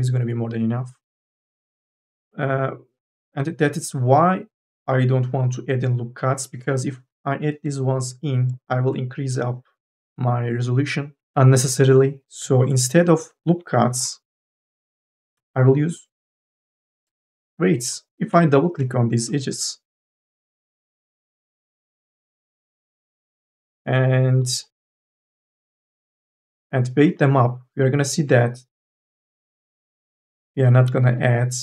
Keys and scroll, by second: 7.3 k, 7.3 l, 13.3 ctrl+z, 14.5 q, 15.1 2, 15.5 e, 19.0 q.